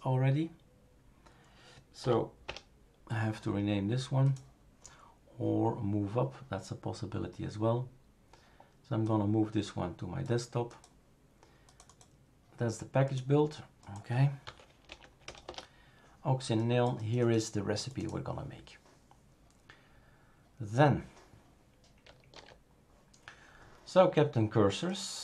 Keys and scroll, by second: 2.0 p, 2.4 Return, 14.4 F2, 14.9 Right, 15.2 BackSpace, 15.4 Return, 22.3 super+f.